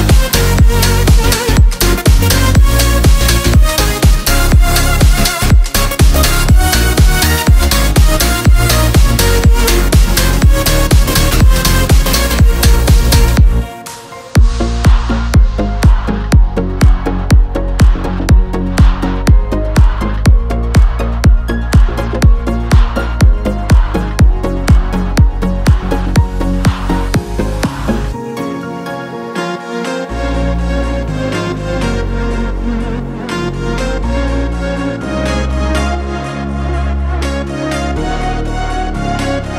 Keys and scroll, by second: 2.3 shift+Up, 3.1 i, 5.4-8.5 typing, 8.8 Escape, 9.5-10.3 typing, 11.5 1, 11.6 4, 11.8 Return, 14.8 1, 14.9 0, 15.2 Return, 16.1 1, 16.3 0, 16.4 Return, 18.9 Right, 20.6 Up, 23.6 alt+Tab, 24.5 Tab, 29.8 Left, 30.7 Right, 35.5 ctrl+g, 38.9 space.